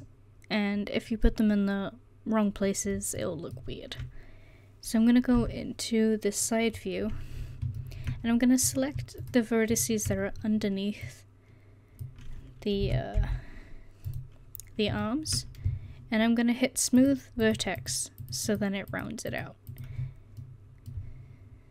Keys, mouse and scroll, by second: 0.0 middle click, 0.2 right click, 0.4 middle click, 5.4 KP_3, 8.7 right click, 12.0 click, 12.8 r, 17.0 click, 20.4-21.7 middle drag.